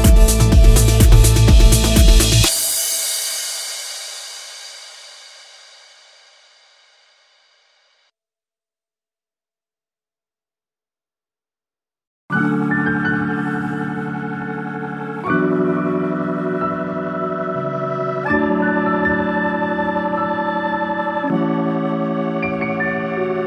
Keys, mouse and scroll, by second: 0.0 middle click, 2.3 click, 2.9 click, 3.4 click, 4.7 click, 5.2 click, 5.7 click, 6.0 click, 6.4 click, 6.7 click, 7.0 click, 7.1 click, 7.3 click, 7.4 click, 7.5 click, 7.6 click, 7.8 click, 7.9 scroll down 3, 8.0 middle click, 9.0 click, 9.5-10.5 scroll up 8, 10.1 middle click, 10.8 click, 12.5 click, 13.7 click, 14.8 click, 15.3 click, 16.4 click, 21.0 scroll down 4, 21.1 middle click, 23.2 shift+f.